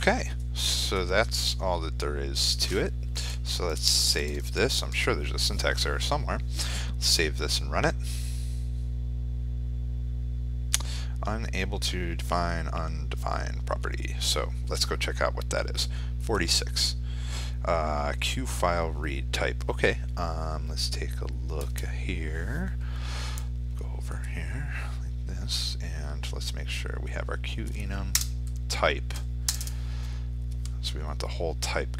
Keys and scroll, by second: 3.2 ctrl+s, 4.5 ctrl+r, 23.9 F4.